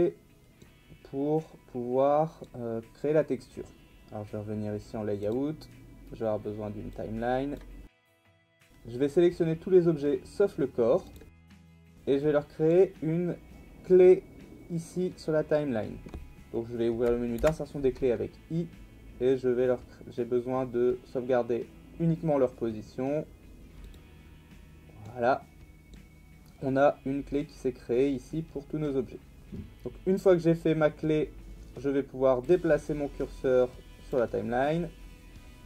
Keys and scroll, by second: 17.4 i.